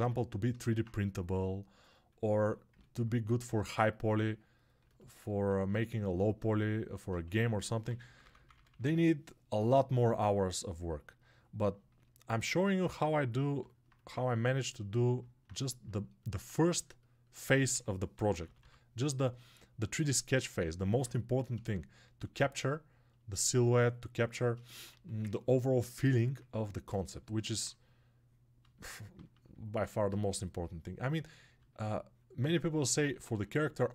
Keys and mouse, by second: 0.1 ctrl+r, 2.9-5.9 shift+right drag, 5.9-25.1 alt+drag.